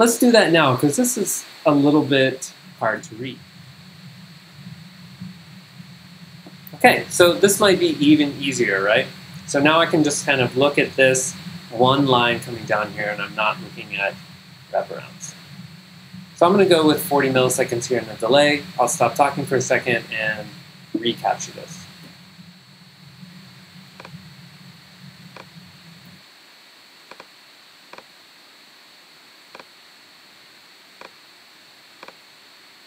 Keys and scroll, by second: 2.5-3.3 typing, 22.1 v, 26.1 g.